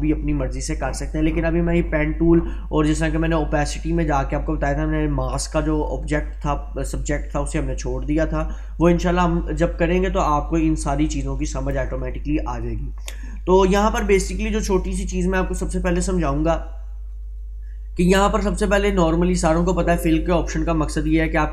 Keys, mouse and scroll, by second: 19.4-21.1 drag.